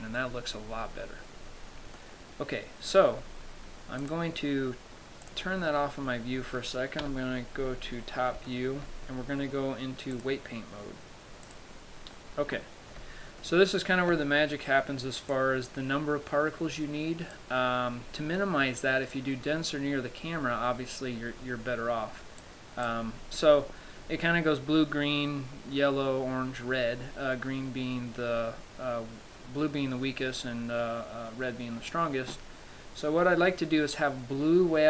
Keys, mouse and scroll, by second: 0.3-2.5 scroll down 6, 2.5 middle click, 4.4 click, 5.6 click, 6.1 middle click, 6.6-7.0 scroll down 2, 7.3-7.8 scroll down 2, 7.3 KP_7, 8.1-9.0 scroll down 5, 9.0 shift+middle click, 9.3-9.7 scroll up 1, 11.8 click, 13.7 shift+middle click, 15.6 click, 22.8 click.